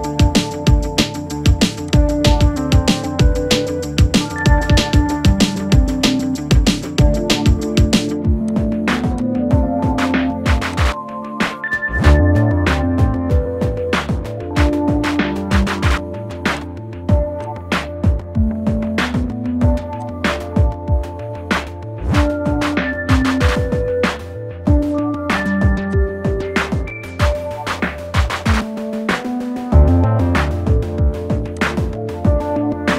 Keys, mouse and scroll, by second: 1.9-13.2 drag, 13.2 Left, 16.5-31.6 drag.